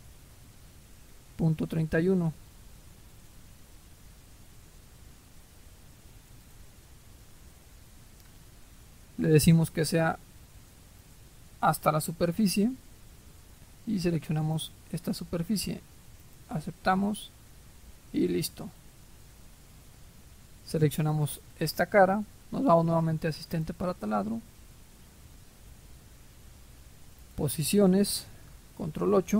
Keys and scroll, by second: 3.3-3.9 typing, 28.8 ctrl+8.